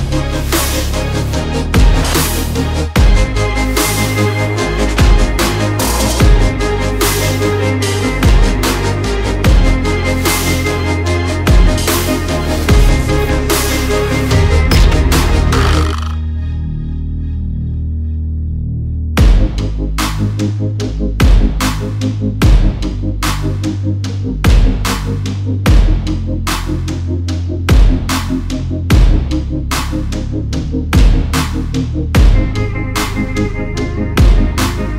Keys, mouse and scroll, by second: 0.6 double click, 1.4 alt+click, 2.0 click, 2.3-2.6 alt+scroll down 1, 3.4-3.8 alt+scroll up 1, 3.8-4.1 alt+scroll down 1, 4.1 click, 5.8-6.4 alt+scroll up 3, 6.6 click, 7.1 double click, 7.4 click, 7.7 alt+scroll down 1, 8.1 alt+scroll up 1, 8.4 click, 9.5 double click, 9.8 click, 10.9 double click, 11.4 alt+scroll down 1, 11.8 alt+scroll up 1, 12.1 click, 13.0 double click, 13.2 click, 13.4 double click, 14.1 alt+scroll down 1, 14.5 alt+scroll up 1, 14.9 click, 15.6 double click, 16.0 click, 18.5 alt+scroll down 1, 18.9 alt+scroll up 1, 19.2 click, 19.5 alt+scroll down 1, 19.8 alt+scroll up 1, 20.5 click, 21.0 alt+scroll down 1, 21.6 alt+scroll up 1, 22.3 click, 22.5 double click, 24.4 click, 24.7-25.1 alt+scroll up 1, 25.6 click, 27.2 double click, 27.5 click, 28.9 double click, 29.3 alt+scroll down 1, 30.1 click, 30.8 alt+scroll down 1, 31.3-31.6 alt+scroll up 1, 31.9 click, 33.8 double click, 34.1 click.